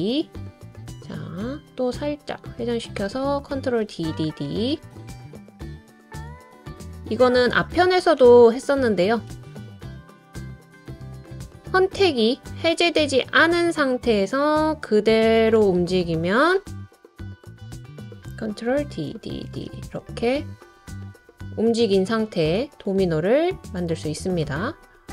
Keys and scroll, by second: 3.8 super+d, 4.1 super+d, 4.5 super+d, 8.0 super+d, 8.3 super+d, 8.6 super+d, 16.4 Down, 16.7 Right, 16.9 Right, 17.0 Right, 17.2 Right, 17.4 Down, 17.7 Down, 18.0 Down, 18.7 super+d, 19.1 super+d, 19.4 super+d.